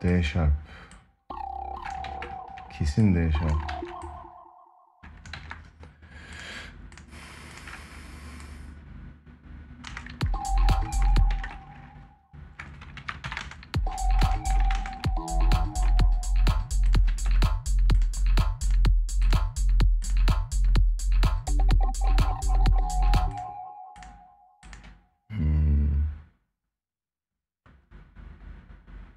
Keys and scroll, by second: 1.8 ctrl+z, 3.5 ctrl+z, 5.1 ctrl+z, 9.6 space, 11.1 ctrl+s, 12.7 ctrl+a, 16.8 ctrl+s, 22.7 space.